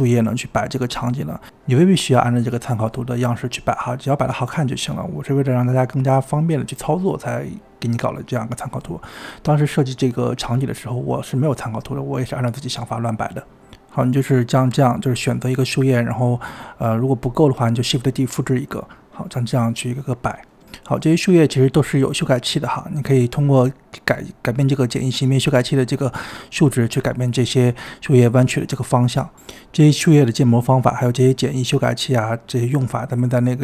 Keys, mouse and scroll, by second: 1.1-2.4 middle drag, 2.4-4.1 scroll up 7, 4.1-4.6 scroll up 1, 4.6 click, 5.6-7.0 scroll up 1, 7.0-7.6 scroll up 1, 7.6-8.8 middle drag, 8.8 KP_1, 9.9-10.6 scroll up 2, 10.6-12.1 shift+middle drag, 12.1 shift+d, 13.1-14.4 typing, 15.5 click, 16.6-17.0 shift+middle drag, 17.0-18.0 typing, 18.2 scroll down 1, 18.4 shift+middle click, 18.7 click, 19.0 scroll down 1, 20.1 scroll up 2, 21.9 click, 23.6-26.2 drag, 26.2-28.5 typing, 26.6 click, 28.9-30.7 drag, 30.8 click, 31.4-33.6 typing, 32.4 click.